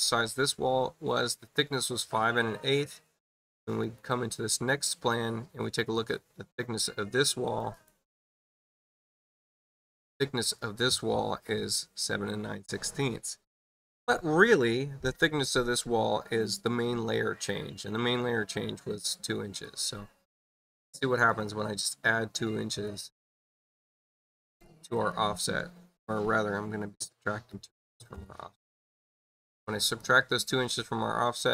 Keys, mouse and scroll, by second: 1.5 click, 2.7 click, 3.8 click, 6.9 space, 7.4 click, 7.7 click, 19.6 click, 21.2 right click, 22.6 click, 24.9 click, 29.8 click.